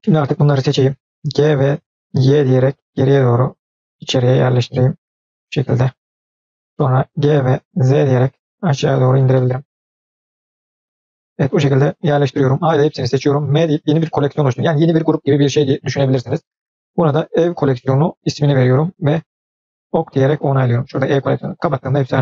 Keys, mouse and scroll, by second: 0.0 click, 1.4 g, 5.1-6.9 middle drag, 7.5 g, 9.3-12.1 middle drag, 12.6 a, 13.6 m, 21.5 click.